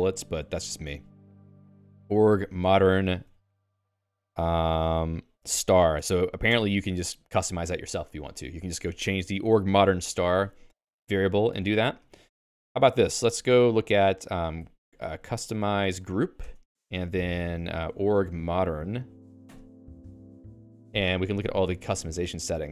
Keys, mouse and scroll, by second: 1.5-3.9 typing, 4.8 ctrl+j, 5.2 ctrl+j, 5.4 ctrl+j, 6.6 Return, 7.3 j, 7.5 j, 11.0 q, 12.3 ctrl+g, 13.0 alt+x, 14.4-16.3 typing, 16.6 Return, 17.7-19.1 typing, 19.6 Return, 20.8-22.0 Down.